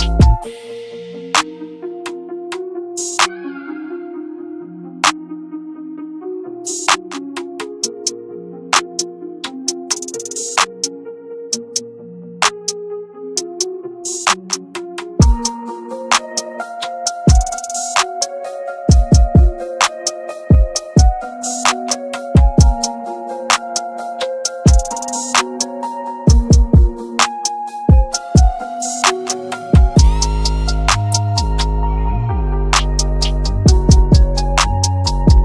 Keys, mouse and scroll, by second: 2.4-3.0 scroll down 1, 3.0-3.5 scroll up 1, 3.5 click, 7.8-8.9 scroll down 1, 8.9-9.7 scroll up 1, 9.7-11.0 scroll down 1, 11.0-12.1 scroll up 1, 12.1 click, 14.4-15.6 scroll down 1, 15.6-17.1 scroll up 1, 18.6 click, 23.3-23.7 scroll down 1, 23.7 scroll up 1, 24.3 click, 25.1-25.4 scroll down 1, 25.4 click, 31.7-32.1 scroll down 1, 32.7 click, 33.7-34.6 scroll down 1, 34.6-34.9 scroll up 1.